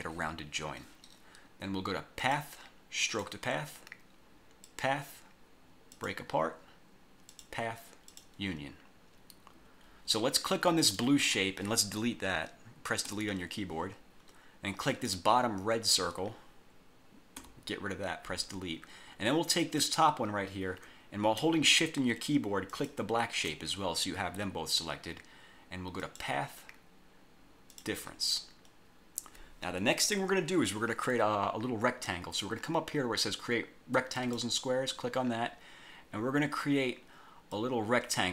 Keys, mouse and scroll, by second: 2.3 click, 3.2 click, 4.8 click, 6.1 click, 7.5 click, 8.2 click, 10.9 click, 13.2 Delete, 15.0 click, 17.5 Delete, 19.7 click, 22.8 shift+click, 26.1 click, 27.8 click, 34.3 click, 37.6-38.3 drag.